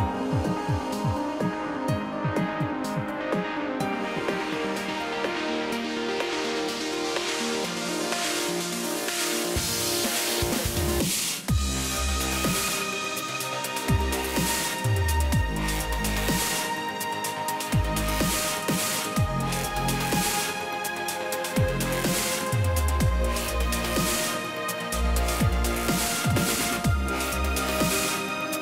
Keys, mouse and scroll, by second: 0.3 click, 0.3 click, 1.4 click, 1.9 =, 2.0 =, 2.4 scroll down 2, 3.8 click, 4.9 click, 5.9 click, 8.0 click, 10.4 click, 11.5 click, 11.6 click, 12.1 click, 13.0 click, 13.1 click, 13.6 click, 13.9 Delete, 15.1 click, 15.9 click, 15.9 click, 17.9 click, 20.0 click, 20.5 F1, 21.6 click, 22.3 click, 22.5 F2, 23.3 click, 23.3 click, 23.9 click, 24.4 click, 24.5 click, 25.0 click, 25.5 click, 25.8 Delete, 26.8 click, 27.7 click, 28.2 F1.